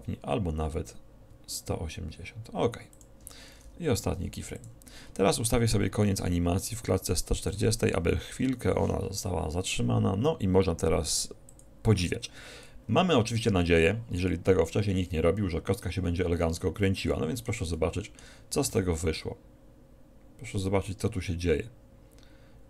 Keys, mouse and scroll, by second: 3.7-4.9 drag, 4.0 i, 7.1-8.9 drag, 8.4 e, 11.5-13.3 drag, 13.3 a, 14.3-16.1 middle drag, 17.2-19.5 middle drag, 18.9 alt+a.